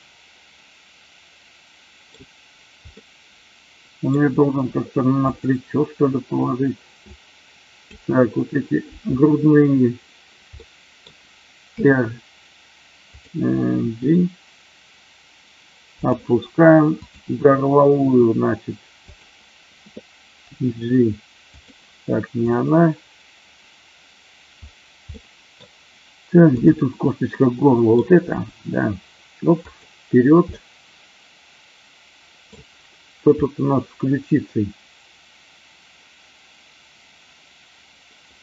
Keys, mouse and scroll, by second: 2.9-4.0 middle drag, 4.4 r, 5.2 click, 7.1 click, 10.6 middle click, 11.7 r, 13.7 g, 16.0 click, 18.1 g, 19.1 click, 20.5 g, 21.5 click, 22.3 click, 25.1 middle click, 27.3 middle click, 28.2 g, 29.6 click, 30.4 scroll up 1, 30.6-32.4 middle drag, 32.4 scroll down 1.